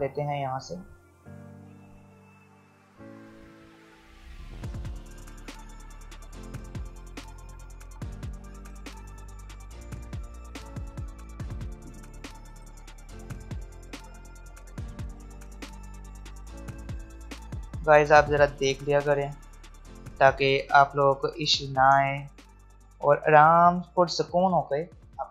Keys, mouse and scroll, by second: 3.4-8.4 drag, 12.6 alt+scroll down 1, 13.0 alt+scroll up 1, 13.7-15.0 drag, 15.0 alt+scroll down 1, 16.3 alt+scroll up 1, 17.5 alt+scroll down 1, 18.3 alt+scroll up 1, 19.9 alt+scroll up 1, 20.5-23.5 drag, 23.5-24.4 alt+scroll down 2, 24.4-25.3 alt+scroll down 1.